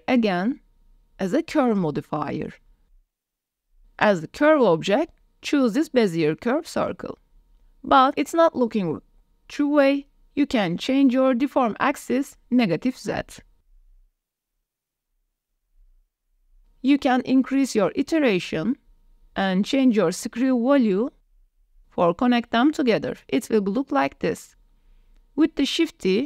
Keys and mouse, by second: 4.2 click, 7.2-7.9 drag, 8.1 click, 9.4 s, 11.3-12.5 drag, 14.7-15.1 drag, 15.9 shift+drag, 16.2-16.7 drag, 16.7-17.4 middle drag, 18.5 middle click, 19.9-20.5 middle drag, 20.7 shift+middle drag, 21.4-24.1 middle drag, 24.2 middle click, 24.9-25.4 middle drag, 25.4 click, 25.5 ctrl+z, 25.7 shift+drag, 26.1 click.